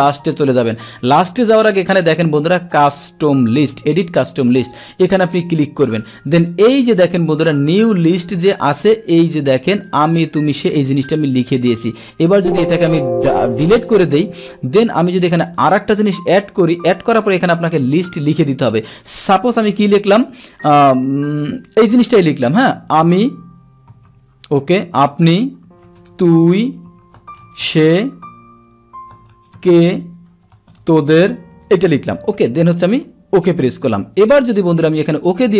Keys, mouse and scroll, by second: 5.0 click, 6.3 click, 7.5 click, 9.6 click, 12.2 click, 13.5 click, 14.3 click, 15.5 click, 17.1 click, 33.3 click, 34.8 click.